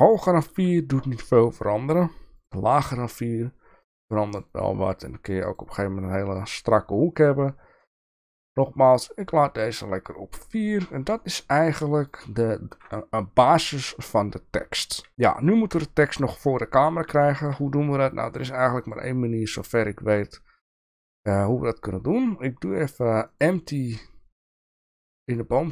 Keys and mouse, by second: 0.1 click, 3.1 click, 3.8 click, 4.3 click, 4.5 click, 5.6 click, 8.0 click, 8.5 click, 9.8 click, 12.0 click, 13.7 KP_1, 15.1 KP_1, 15.7 KP_0, 17.3 shift+middle click, 18.8 click, 23.9-25.4 drag.